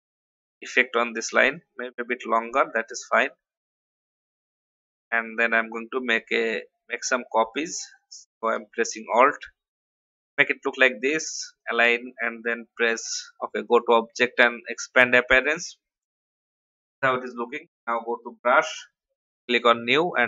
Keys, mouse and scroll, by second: 3.7 scroll down 1, 5.8-7.3 alt+drag, 8.5 ctrl+d, 8.9 ctrl+d, 9.7 click, 13.6-20.2 drag.